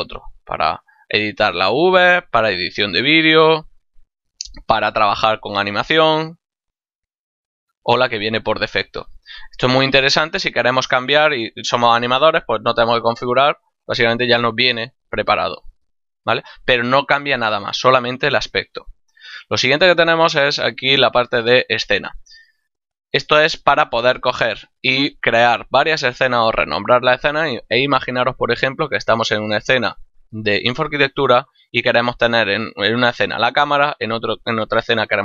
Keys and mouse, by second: 0.8 click, 2.2 click, 3.4 click, 5.9 click, 7.4 click, 10.4 click, 22.4 click.